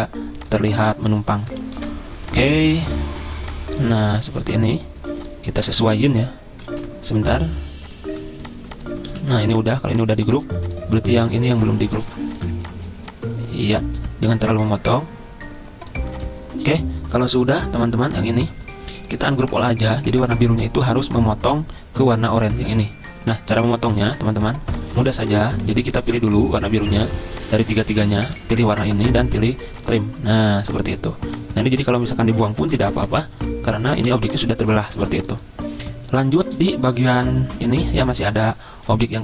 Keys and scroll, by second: 1.8 ctrl+g, 6.2 ctrl+z, 6.7 ctrl+z, 9.0 ctrl+z, 22.7 ctrl+z, 24.0 ctrl+z, 25.7 ctrl+z, 28.0 ctrl+z, 32.7 Delete, 33.4 Delete, 34.0 Delete, 35.0 ctrl+z, 38.1 ctrl+z.